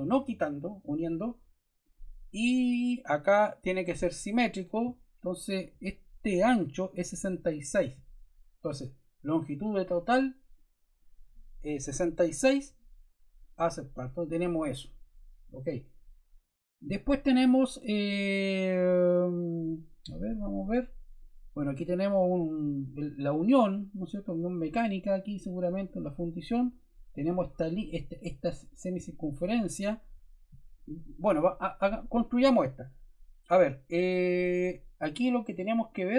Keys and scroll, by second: 11.6 6.